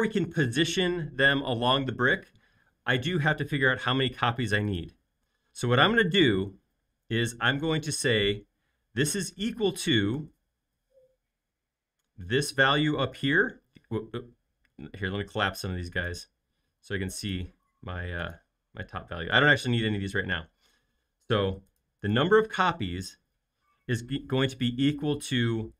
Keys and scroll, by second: 10.5 =.